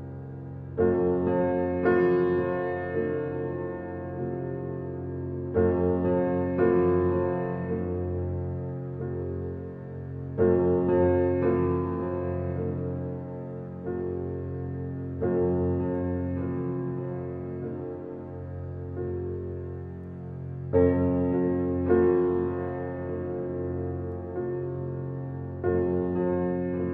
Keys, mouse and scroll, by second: 0.3-1.1 scroll up 1, 3.1-3.8 scroll down 1, 6.3 Escape, 7.1 click, 8.3 scroll up 1, 8.9 alt+middle click, 10.5 click.